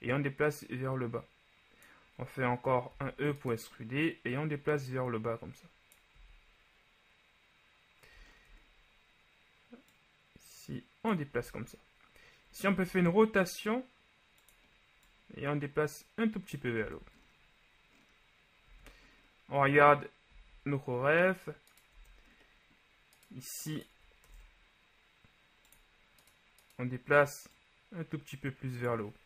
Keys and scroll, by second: 3.1 e, 6.4 z, 11.5 z, 12.9 r, 17.0 Tab, 18.8 z, 22.0 Tab, 24.4 ctrl+Tab.